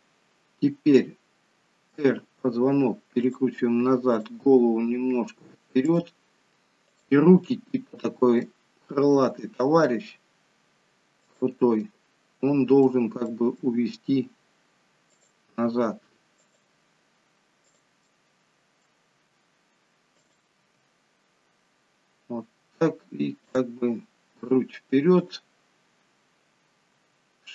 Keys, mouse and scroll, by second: 2.1 r, 4.0 click, 4.7 r, 6.8 click, 7.4 middle click, 9.2 g, 11.7 middle click, 13.2 middle click, 13.7 g, 15.7 r, 17.7 click, 18.0 middle click, 19.0 r, 20.6 g, 25.2 click, 27.0 g.